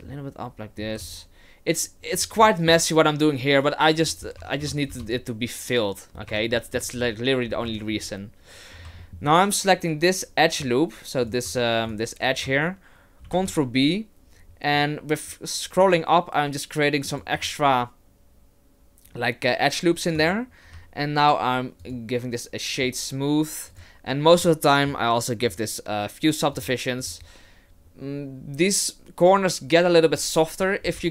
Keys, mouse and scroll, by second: 0.1 middle click, 0.5 middle click, 0.8 g, 2.5 middle click, 4.0 Tab, 4.4 Tab, 4.6 Tab, 4.9 KP_0, 6.1-6.6 scroll down 3, 6.3 Tab, 6.6 middle click, 7.0-7.6 scroll down 1, 7.6 scroll down 1, 7.8 alt+right click, 8.7 scroll down 2, 9.0 shift+middle click, 9.2 scroll up 1, 11.2 right click, 11.9 shift+right click, 13.2 ctrl+b, 17.4 right click, 20.2 Tab, 20.7 w, 23.7 click, 24.4 click, 26.5 click, 27.0 click, 30.8 KP_0.